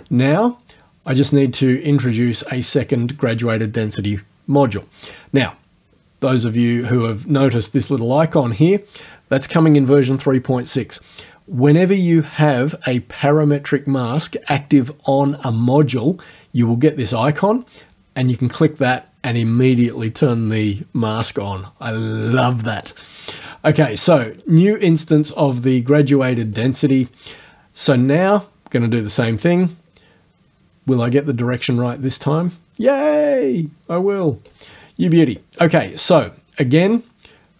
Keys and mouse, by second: 18.3 click, 22.9 click, 24.3 click, 26.5 click, 32.1-34.7 right drag, 37.0 click.